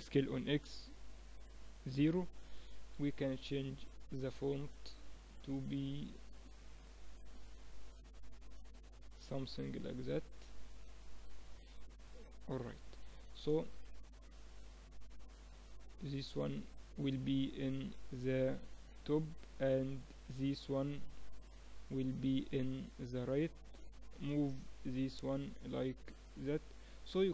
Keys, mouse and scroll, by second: 3.0 n, 4.3-7.1 drag, 12.9 n, 15.1-16.9 drag, 16.9-21.2 right drag, 21.2-22.4 middle drag, 22.4 click, 23.3-24.8 right drag, 24.8-26.7 middle drag, 26.7 right click, 27.0-27.3 middle drag.